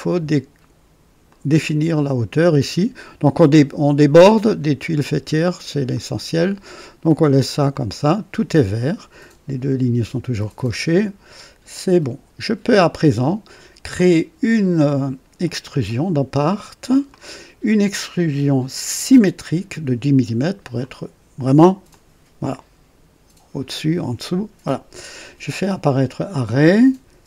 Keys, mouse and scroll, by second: 1.2 click, 5.8 click, 7.6 click, 11.6 click, 13.9 click, 15.4 click, 17.0 click, 18.9 click, 20.7 click, 21.8-23.6 drag, 25.8 click, 27.1 space.